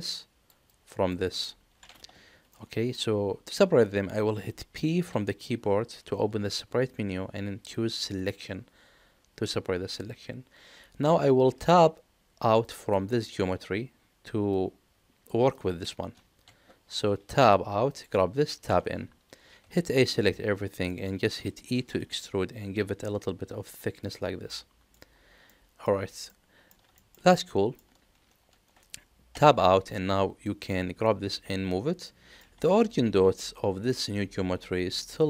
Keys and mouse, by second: 2.5 middle click, 4.9 p, 17.3 Tab, 18.6 Tab, 19.6 a, 20.8 middle click, 21.6 e, 24.4 middle click, 25.5 middle click, 26.3 middle click, 26.9 shift+middle click, 27.2 middle click, 29.3 Tab, 30.4 middle click, 32.0 middle click.